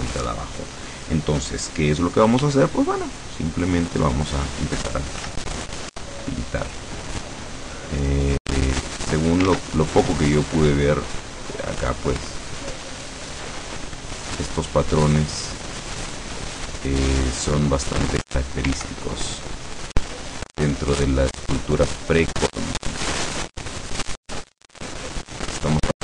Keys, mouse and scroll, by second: 2.5 f, 3.9 click, 5.3 f, 6.2 click, 8.5 click, 9.5 ctrl+z, 12.3 click, 13.2 click, 14.3 click, 15.2 click, 16.7 click, 18.9 ctrl+z, 19.5 click, 20.5 click, 21.1 click, 21.8 click, 22.3 click, 23.1 click, 23.8 click, 24.5 click, 25.2 click.